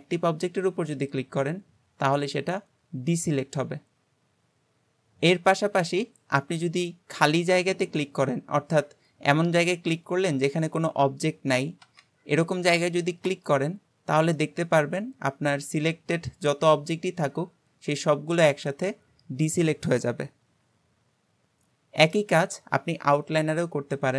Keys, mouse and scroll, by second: 0.0-2.4 scroll up 1, 5.9-8.3 middle drag, 8.3-10.6 scroll down 2, 10.6-12.1 scroll down 1, 13.3 click, 14.4-17.4 middle drag.